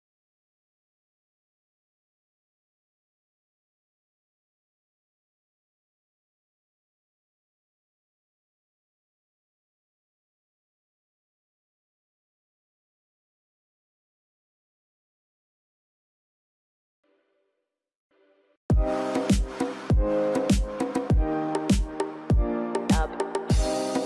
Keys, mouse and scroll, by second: 18.2 scroll up 1, 19.6 scroll down 1, 20.4 shift+v, 22.0 shift+c, 23.0 middle click.